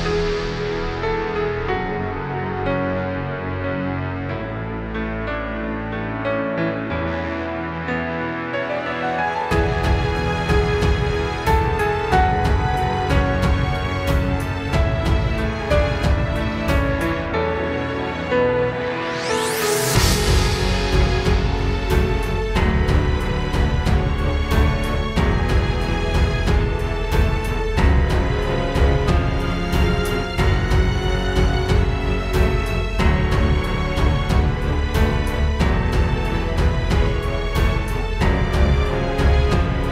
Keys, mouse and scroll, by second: 5.0 click, 8.6 click, 9.6 click, 11.3 KP_0, 16.3 click, 26.1 space, 27.1 right click, 28.4 click, 32.1 space, 36.3 space, 36.7 right click, 38.2 click.